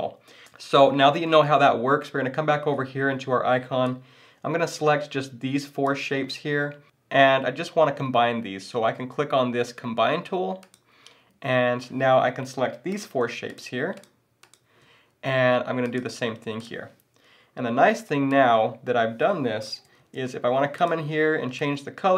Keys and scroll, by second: 0.8 BackSpace, 20.0 super+z.